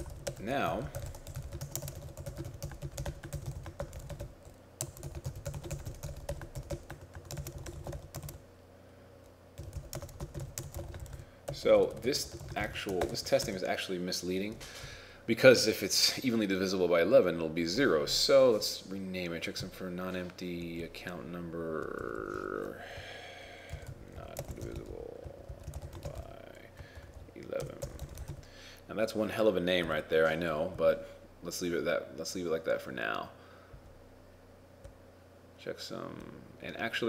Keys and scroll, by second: 0.0 shift+t, 1.9-8.3 typing, 10.1-13.1 typing, 26.1 shift+b, 27.0 shift+e.